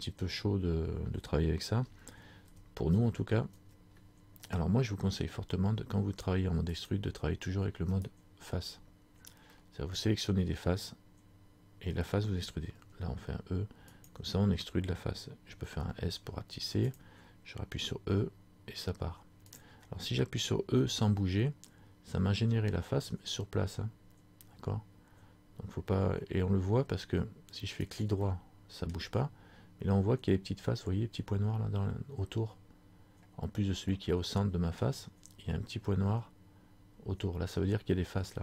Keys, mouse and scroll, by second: 0.0 middle click, 2.7 ctrl+z, 7.0 click, 8.1 right click, 9.1 scroll down 2, 9.6 scroll up 1, 9.7 middle click, 10.3 scroll down 1, 12.9 e, 15.8 s, 27.9 right click, 28.3 scroll up 1, 28.5 middle click, 29.2 scroll down 1, 29.3 scroll up 2, 31.8 scroll up 2, 34.1 middle click.